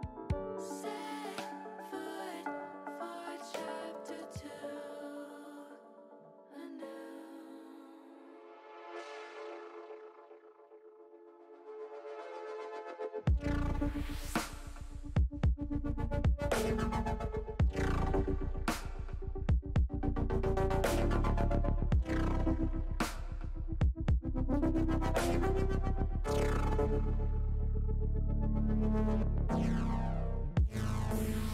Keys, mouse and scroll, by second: 1.8 click, 3.9 click, 4.6 click, 5.7-6.9 drag, 8.1 ctrl+r, 9.1 click, 9.7 click, 10.7 click, 14.7 ctrl+b, 17.5 click, 18.2 ctrl+z, 18.9 click, 20.7 ctrl+b, 21.8 click, 23.3 ctrl+z, 24.0 ctrl+b, 31.4 click.